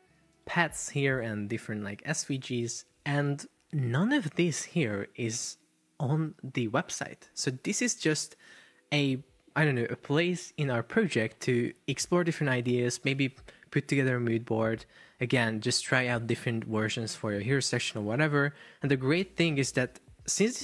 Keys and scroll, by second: 0.5 Escape.